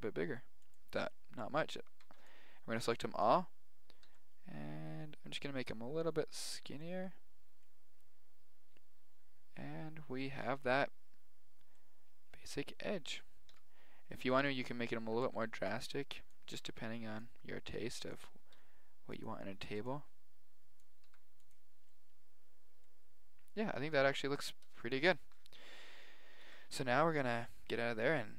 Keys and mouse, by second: 1.6 a, 2.0 b, 4.0 s, 5.7 middle click, 9.4 middle click, 11.7-16.8 middle drag, 13.5 KP_1, 15.0 a, 15.2 b, 16.5 b, 18.5 s, 19.5 a, 19.6 b, 21.0 s, 25.5-27.8 middle drag, 26.4 Tab, 28.0-28.3 right drag.